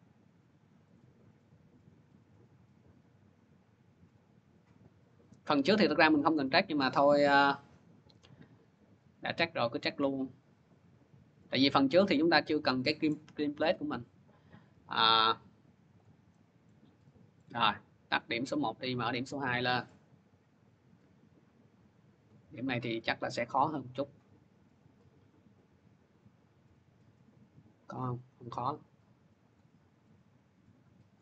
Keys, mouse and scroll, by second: 1.3-2.4 drag, 4.9 click, 12.9-14.7 middle drag, 15.8 click, 16.5 middle click, 17.2 middle click, 18.6-19.1 scroll, 19.9-20.5 scroll, 20.5-22.2 scroll, 20.9 click, 22.2 scroll, 24.0 click, 26.2 scroll down 2, 29.3 click, 30.9 click.